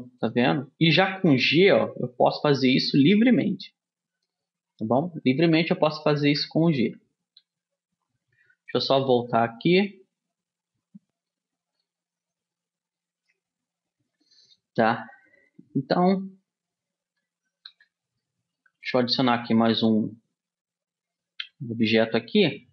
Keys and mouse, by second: 1.6 g, 6.4 ctrl+z, 6.9 ctrl+z, 7.6 ctrl+z, 8.2 ctrl+z, 8.7 ctrl+z, 9.1 ctrl+z, 9.6 ctrl+z, 10.0 ctrl+z, 13.1-17.9 middle drag, 17.9 a, 18.4-20.5 middle drag, 19.3 shift+a.